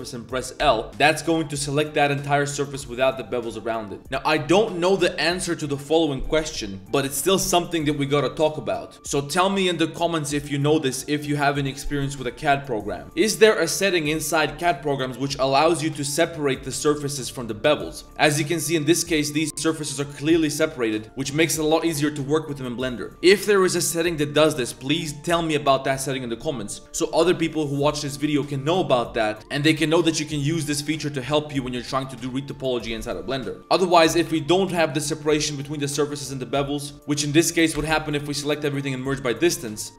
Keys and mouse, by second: 0.7 l, 1.0 click, 2.2 click, 3.7 z, 3.8 drag, 13.0 ctrl+z, 13.5 click, 14.7-15.2 drag, 15.4 drag, 16.3 3, 16.4 click, 16.6 a, 16.8 a, 17.4 l, 17.8 click, 19.1 l, 20.2 g, 21.0 drag, 21.6 click, 22.3 drag, 23.0 click, 23.3-23.7 drag, 24.0-24.3 drag, 24.7 drag, 27.4 drag, 30.6 click, 33.6-35.1 typing, 36.2 a, 36.9 m, 37.7 m, 39.9 a.